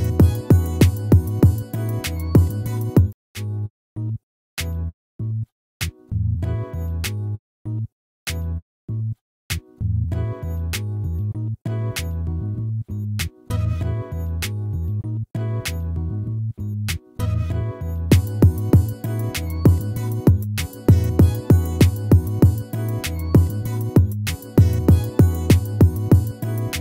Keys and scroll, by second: 23.7 ctrl+-.